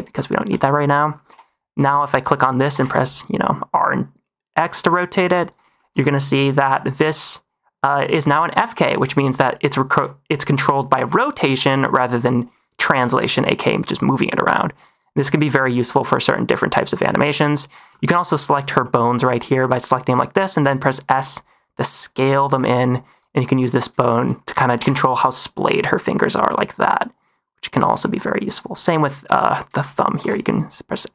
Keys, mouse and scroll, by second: 0.7 middle click, 1.2 n, 1.7 click, 2.3 middle click, 2.6 r, 2.7 x, 5.7 shift+middle click, 6.0 middle click, 6.4 r, 6.5 x, 8.5 click, 8.8 shift+middle click, 9.8 r, 10.9 x, 11.4 r, 11.5 x, 12.8 r, 12.9 x, 15.1 middle drag, 15.8 middle drag, 16.3-16.7 drag, 17.0 shift+middle drag, 17.2 middle drag, 17.7 click, 17.9 shift+middle drag, 18.4 middle click, 18.7 shift+middle drag, 19.0 drag, 20.7 middle drag, 21.1 s, 22.7 middle click, 23.0 click, 23.4-23.7 middle drag, 23.9 shift+middle drag, 24.3 middle click, 24.6 r, 24.8 r, 27.9 middle click, 28.4 click, 28.6 click, 28.9 middle click, 29.7 shift+middle click, 30.1 s.